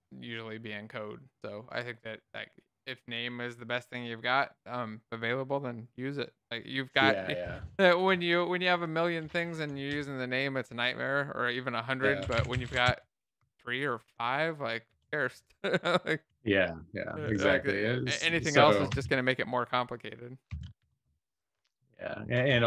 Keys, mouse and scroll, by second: 10.0 Left, 10.0 Down, 10.4 Up, 11.3 shift+F6, 12.5-13.8 typing, 14.2 ctrl+s, 14.3 Down, 14.9 Up, 15.1 Left, 15.2 Left, 17.2 Right, 17.4 Right, 20.5 Down, 20.8 Up, 22.5 Down.